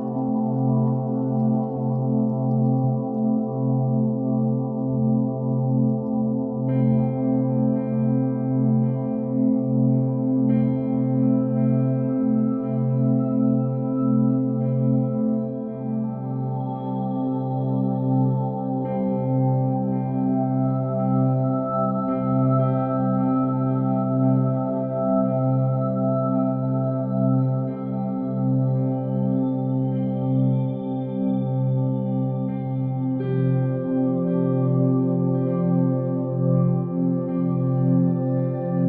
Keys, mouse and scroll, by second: 0.2 click, 0.7 r, 1.3 click, 1.6 KP_0, 3.5 middle click, 4.5 KP_7, 5.5 g, 5.9 click, 6.1 r, 6.9 click, 7.1 g, 7.9 click, 8.9 KP_0, 11.7 shift+a, 17.6 g, 18.4 click, 19.5-21.6 drag, 20.7 0, 23.1 click, 24.3 g, 24.7 click, 24.8 g, 25.0 y, 26.6 click, 26.9 shift+d, 27.8 click, 28.2 shift+d, 28.9 click, 29.3 g, 29.6 y, 30.1 click, 31.8 g, 33.5 click, 34.3 shift+d, 35.5 right click, 36.3 g, 36.5 y, 37.7 click, 37.9 g.